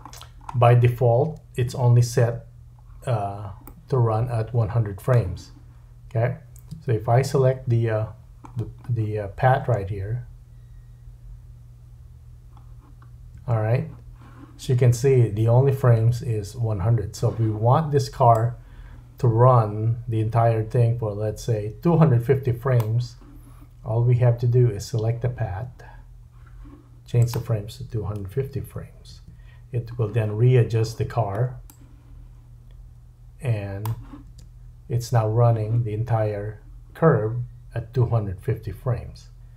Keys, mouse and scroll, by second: 3.6 middle click, 6.8 Tab, 8.4-9.0 scroll up 3, 9.0-9.6 scroll down 2, 9.6 space, 13.4 space, 18.3-39.5 drag, 34.3 space.